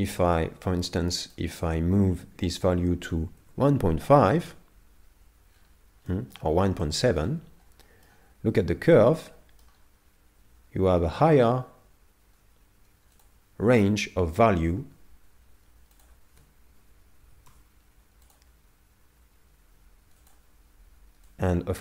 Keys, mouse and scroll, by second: 5.5 scroll down 2, 6.1 middle click, 6.1 scroll down 4, 7.5-8.0 scroll down 2, 7.8 middle click, 13.2 click, 20.2 click.